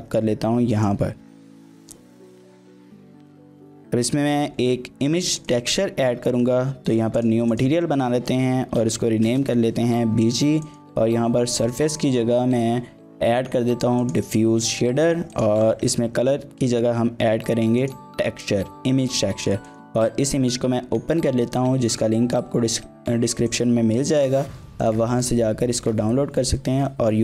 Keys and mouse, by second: 0.7 click, 1.1 s, 1.8 click, 2.5 click, 2.8 g, 3.0 y, 3.4 click, 5.4 click, 7.6-10.2 shift+drag, 10.7-14.2 drag, 15.3-17.9 drag, 19.7 click, 26.9-27.2 drag.